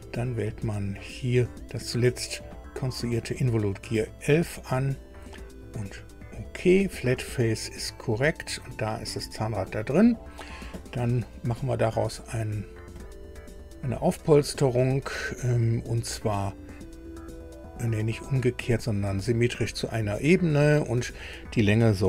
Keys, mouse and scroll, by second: 0.3-0.6 scroll down 2, 4.3 click, 6.2 click, 8.0 click, 11.3 click, 12.9 click, 16.4 click, 17.9 click, 19.1 click, 20.5 click.